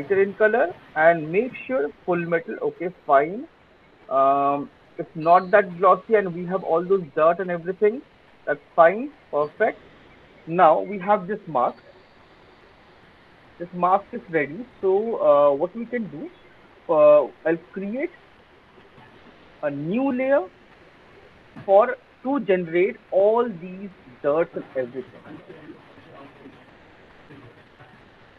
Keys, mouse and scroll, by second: 0.0 click, 0.8 click, 3.5 alt+click, 3.7 alt+middle click, 6.2 alt+click, 6.8 alt+middle click, 7.8 alt+click, 8.3 alt+middle click, 8.6 alt+click, 9.7 alt+middle click, 14.4-14.8 alt+scroll, 17.1-18.1 scroll, 18.1 click, 19.5 click, 25.2 click.